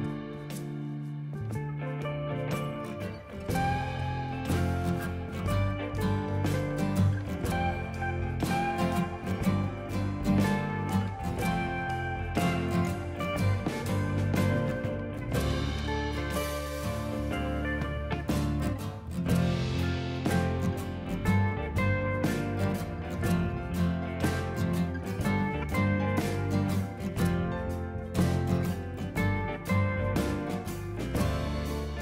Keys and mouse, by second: 5.3 click, 6.6 click, 7.6 Delete, 8.0 click, 11.1 click, 13.7 click, 14.3 KP_5, 14.3 Return, 14.8 click, 15.4 click, 17.1 click, 20.4 click, 21.0 click, 21.6 click, 22.1 click, 22.4 Left, 22.6 Right, 23.4 KP_1, 23.5 Return, 23.8 y, 25.3 click, 25.6 Escape, 26.1 click, 26.2 Escape, 26.6 click, 26.6 Escape, 27.0 click, 27.1 right click, 27.4 click, 27.6 ctrl+x, 27.8 click, 28.8 click, 29.1 click, 31.4 KP_1, 31.5 Return, 31.9 click.